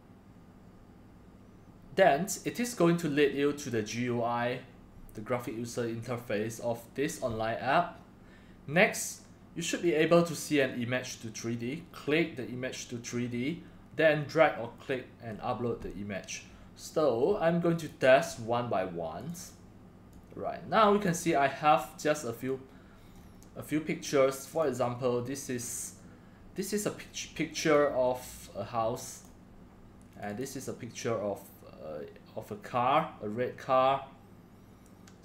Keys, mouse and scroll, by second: 0.3-4.3 drag, 4.3 drag, 10.0 click, 17.9 click, 19.5 click, 21.2-21.7 drag, 22.4 click, 23.2-24.6 drag, 24.6-25.1 right drag, 29.1 click, 31.4 click.